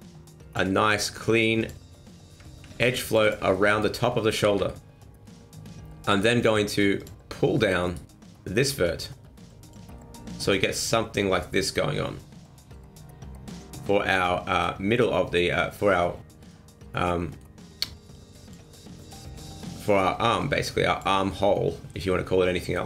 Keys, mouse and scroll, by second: 1.6 click, 2.6 ctrl+r, 3.5 middle click, 4.4 ctrl+z, 4.7 middle click, 7.0 click, 7.8 right click, 8.6 click, 9.9 middle click, 16.5 middle click, 18.1 click, 18.7 middle click, 19.3 right click, 19.9 right click, 20.4 click, 21.2 scroll down 1, 21.3 middle click.